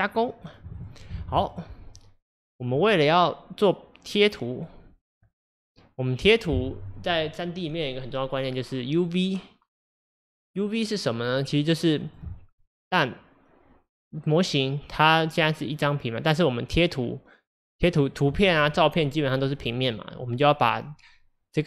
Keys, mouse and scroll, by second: 0.0 click, 0.5 click, 0.8 click, 2.4 middle click, 2.5 scroll up 1.